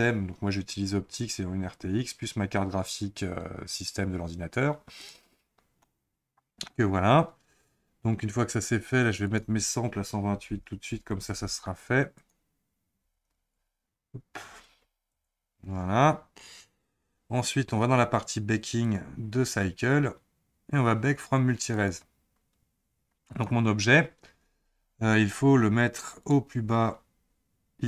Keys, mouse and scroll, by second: 5.8-8.8 middle drag, 9.2-15.2 drag, 16.8-18.8 scroll down 7, 18.8-19.8 drag, 19.8-20.4 scroll down 7, 21.7 click, 23.3 click, 26.2 click, 27.0-27.8 scroll up 1.